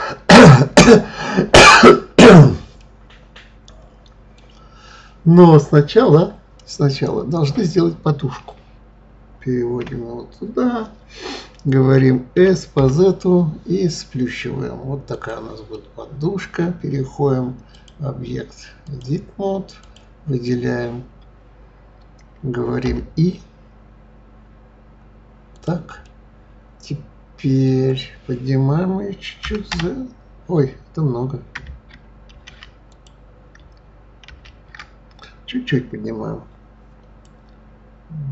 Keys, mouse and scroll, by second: 2.8-5.9 middle drag, 9.8 KP_1, 12.3 s, 15.7-17.7 middle drag, 17.7-19.9 drag, 23.3 i, 26.0-29.0 middle drag, 29.4 g, 34.3 ctrl+z.